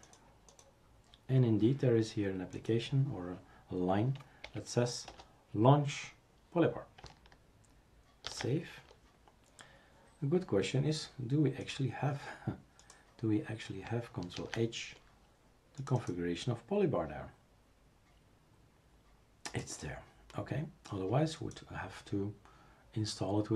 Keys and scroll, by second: 4.4 Left, 8.3 ctrl+s, 14.4 ctrl+h.